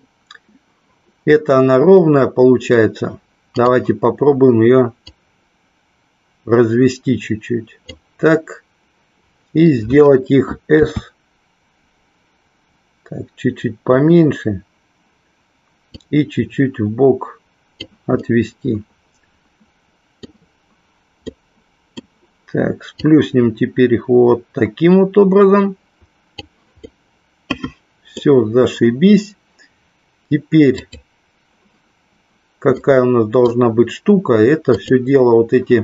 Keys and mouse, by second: 5.2-7.9 drag, 15.9-17.8 drag, 18.2-20.2 middle drag, 21.3 middle click, 23.2-26.3 drag, 26.8-28.3 middle drag, 30.7 click, 32.8 middle click, 34.6 click.